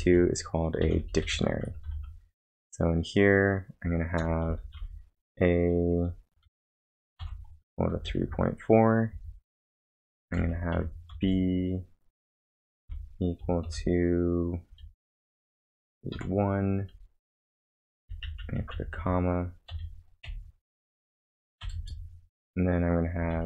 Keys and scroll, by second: 0.0-2.3 typing, 4.6 shift+a, 6.2-9.1 typing, 10.5-11.6 typing, 12.8 =, 13.7 shift+., 16.1 1, 17.9 Left, 18.1 Left, 18.2 Left, 19.5-20.2 typing, 20.2 End, 21.6 ,, 21.7 space, 23.3 shift+'.